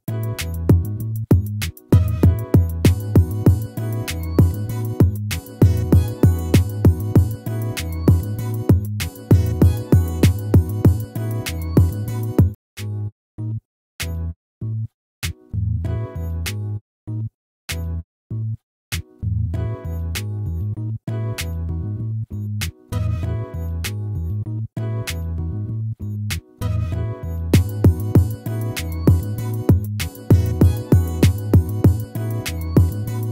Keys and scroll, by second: 21.1 ctrl+-, 26.5 ctrl++, 28.8 ctrl++.